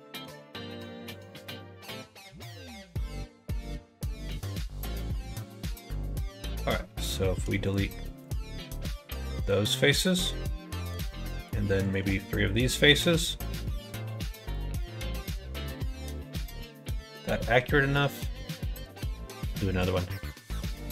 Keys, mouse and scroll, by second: 0.2 x, 0.8 x, 1.9 middle click, 2.4 middle click, 2.9-4.4 middle drag, 4.5 middle click, 5.4 click, 6.3 middle click, 7.0 click, 7.7 shift+click, 8.2 shift+click, 8.7 x, 9.7 middle click, 12.3 middle click, 13.0 x, 14.8-15.9 middle drag, 17.6-18.8 middle drag, 19.7 click.